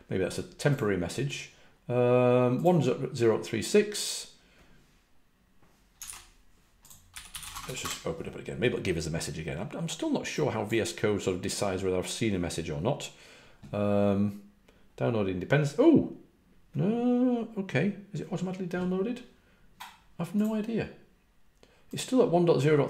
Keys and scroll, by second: 6.0 super+q, 6.0 super+w, 7.1-8.2 typing.